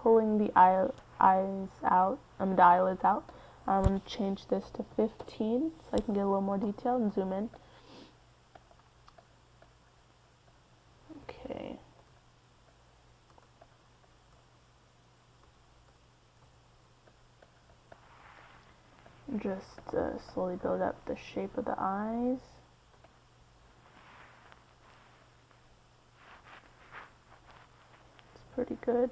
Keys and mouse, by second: 8.5 middle click, 8.7 middle click, 9.3-11.4 drag, 17.8 click, 17.9 middle click, 18.3-20.8 drag, 20.9 KP_1, 22.2-24.8 drag, 26.8-29.1 drag.